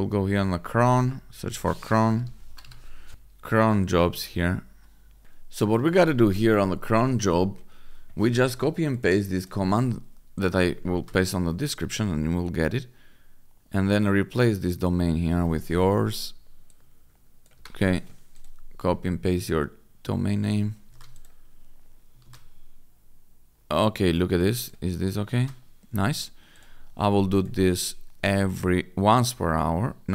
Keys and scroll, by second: 1.7-3.0 typing, 6.0 F5, 10.8 ctrl+v, 17.5 Delete, 20.8 ctrl+c, 22.1 ctrl+v, 25.2 ctrl+c.